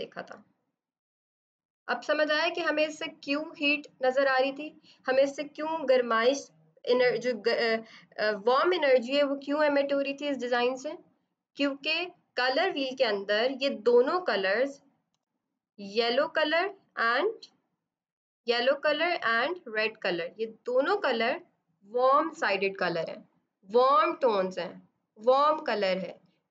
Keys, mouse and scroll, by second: 1.0 d, 2.3 click, 15.0 b, 17.6 click, 25.8 F7.